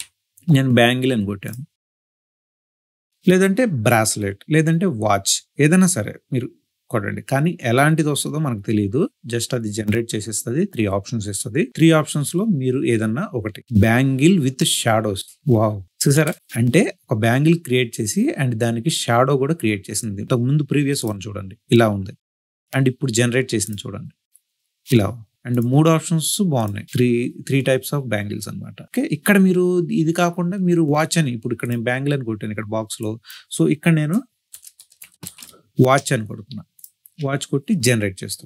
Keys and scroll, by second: 34.1-35.8 typing.